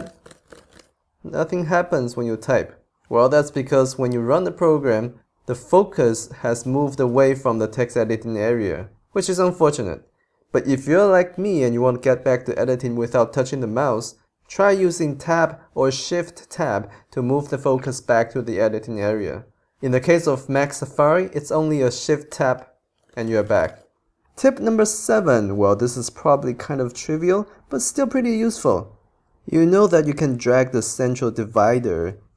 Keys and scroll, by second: 0.0-1.8 typing, 22.3 shift+Tab, 23.0-24.2 typing.